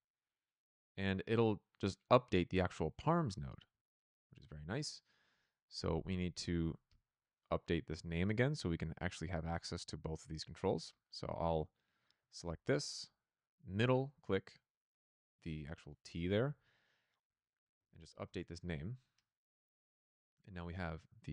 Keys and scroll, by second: 12.3 ctrl+c, 16.4 ctrl+v, 17.4-18.4 typing.